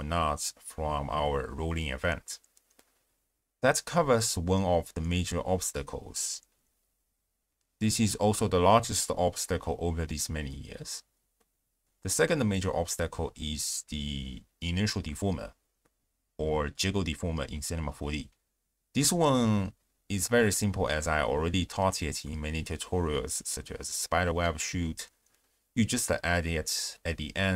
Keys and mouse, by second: 0.2 space, 1.9 click, 2.7 shift+space, 3.9 click, 4.2 click, 4.8 shift+space, 6.1 space, 6.6 z, 7.5 shift+space, 8.8 space, 10.2 space, 11.8 ctrl+alt+shift+q, 14.7-15.7 drag, 16.6 click, 17.5 click, 18.5 ctrl+a, 23.1 click.